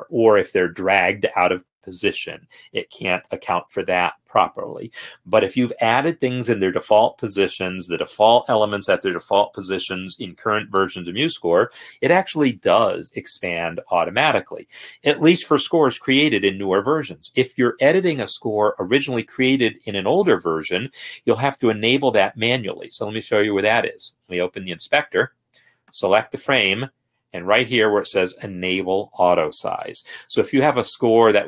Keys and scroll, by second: 13.8 Escape, 24.7 F8.